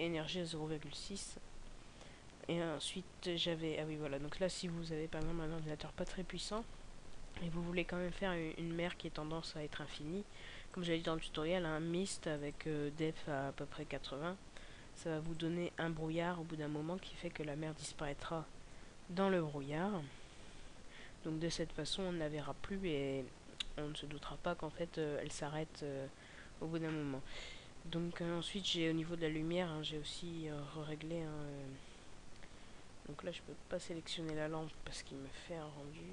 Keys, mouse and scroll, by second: 0.8-1.4 scroll down 2, 2.4-3.0 scroll down 6.